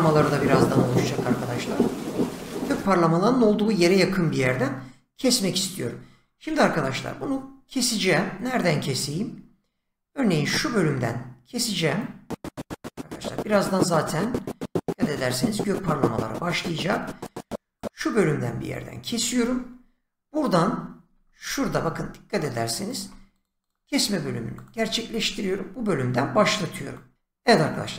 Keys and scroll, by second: 21.0 shift+,, 23.6 shift+,.